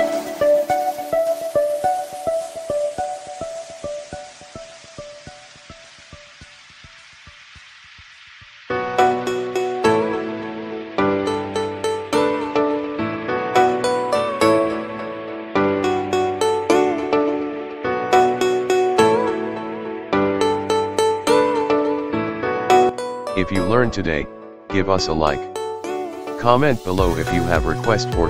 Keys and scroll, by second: 0.7 o, 2.2 o, 14.3 Escape, 22.1 Escape, 25.8 o.